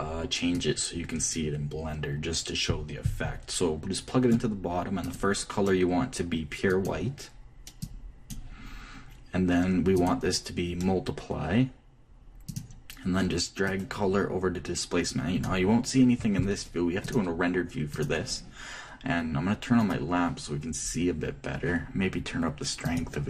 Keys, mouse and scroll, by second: 1.1-3.1 drag, 5.6-9.8 drag, 10.5-12.5 drag, 14.2-16.1 drag, 17.6-19.4 drag, 20.7-22.2 drag, 21.8-23.2 middle drag.